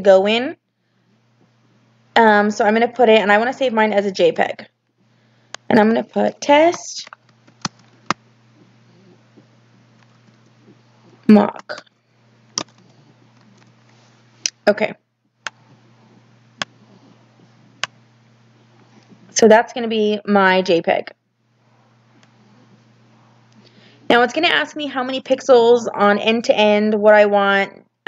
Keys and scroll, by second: 6.6-7.9 typing, 9.7-13.8 typing.